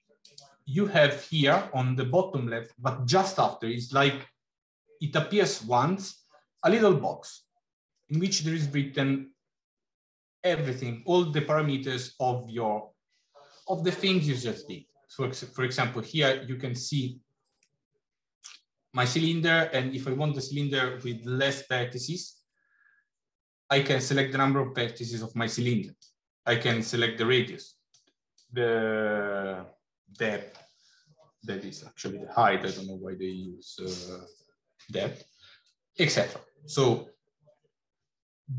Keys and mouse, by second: 8.1 click, 17.5 shift+middle click, 21.8-25.9 drag, 26.4-27.8 drag, 28.2-29.9 drag.